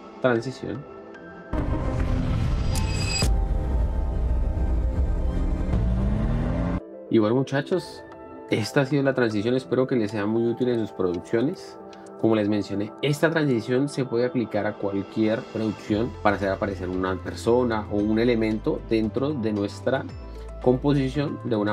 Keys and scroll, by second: 6.4 Escape, 6.6 space.